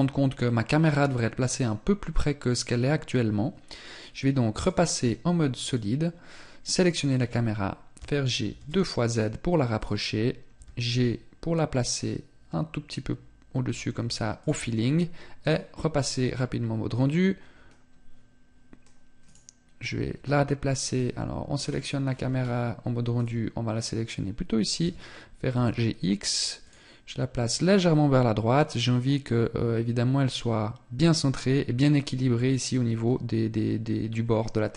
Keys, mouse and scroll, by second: 4.1 click, 6.3 right click, 7.6 g, 9.4 click, 10.2 g, 15.0 click, 20.5-21.6 scroll down 3, 21.6-22.7 scroll up 6, 22.7 click, 24.4 g.